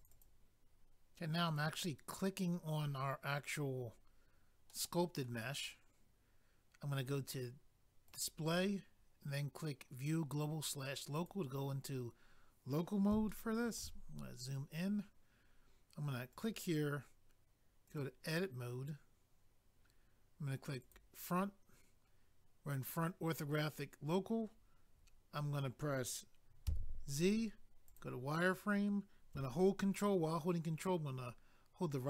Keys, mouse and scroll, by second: 0.0 click, 0.1 click, 0.2 double click, 1.5 click, 1.6 click, 3.4 scroll down 1, 4.7 middle click, 8.1 click, 8.2 click, 11.1 click, 11.3 click, 13.3 shift+middle click, 14.1 scroll up 1, 16.3 click, 16.4 click, 17.8 click, 18.0 click, 18.8 click, 20.8 click, 20.9 click, 27.8 click, 27.9 click, 30.7 ctrl+right click.